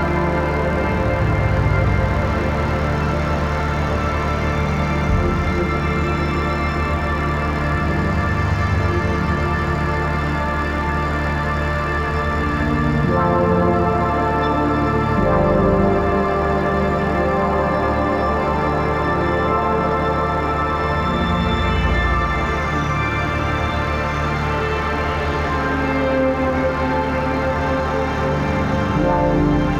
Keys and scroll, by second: 8.7 ctrl+s.